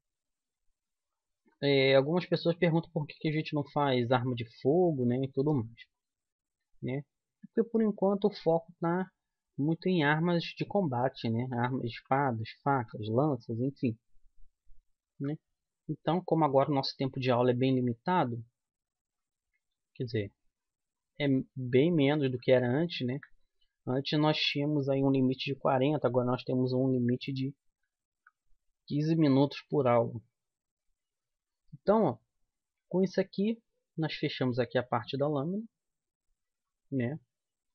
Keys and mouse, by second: 2.1-6.6 middle drag, 7.2-9.2 middle drag, 12.0 a, 12.9 a, 15.3 KP_1, 21.7 middle click, 21.9 middle click, 28.2 KP_1, 33.8-36.7 middle drag.